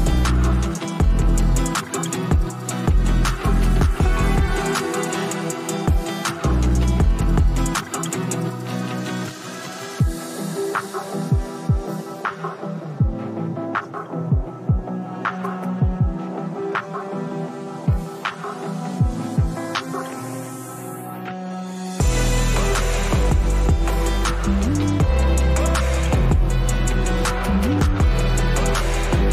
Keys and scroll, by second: 12.9 ctrl+z, 17.7 space.